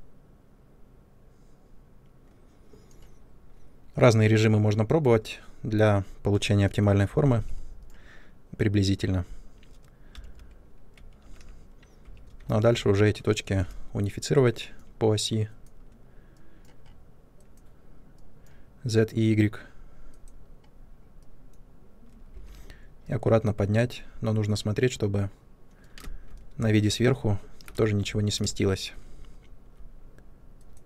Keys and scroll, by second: 6.2 space, 7.2 3, 10.1 Escape, 11.9 1, 13.4 r, 22.3 w, 25.9 ctrl+space, 28.3 ctrl+space.